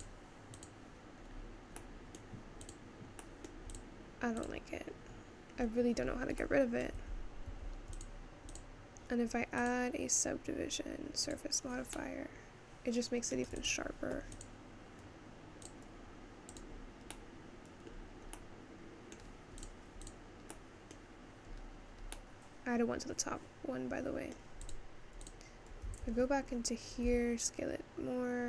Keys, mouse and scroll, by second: 0.0 click, 0.6 click, 1.2 scroll down 1, 1.3-1.8 scroll up 2, 1.8-2.9 middle drag, 2.9 click, 3.4 middle click, 3.8 click, 4.6 click, 5.1-5.8 scroll down 2, 5.8-6.2 scroll up 4, 7.0 middle click, 7.2 Tab, 7.8 Tab, 8.5 click, 8.9 click, 11.7-12.8 drag, 12.8-14.0 middle drag, 14.0 click, 15.0 click, 16.6 click, 17.1 middle click, 17.9 scroll down 2, 18.6 middle click, 19.5-19.9 scroll up 2, 19.9 click, 20.4 click, 20.6 middle click, 21.2 scroll up 1, 21.8-22.4 scroll up 2, 22.4-25.0 middle drag, 25.0 click, 25.5 click, 26.0 Tab, 26.6-27.1 scroll down 1, 27.1 s.